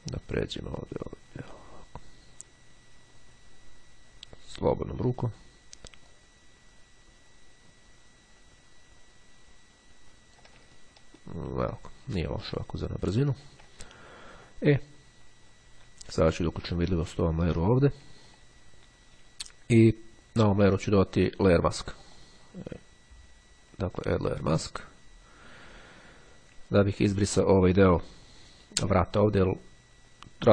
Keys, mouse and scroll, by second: 0.4-6.0 drag, 6.2-10.9 drag, 10.9-12.2 ctrl+scroll down 2, 12.6-13.1 scroll down 2, 13.4-14.0 ctrl+scroll down 2, 14.1-14.6 ctrl+scroll up 3, 16.7 click, 18.1-18.7 scroll down 3, 19.0-19.5 scroll up 2, 21.9 click, 24.3 click, 25.7 click, 26.8-27.3 ctrl+scroll up 2.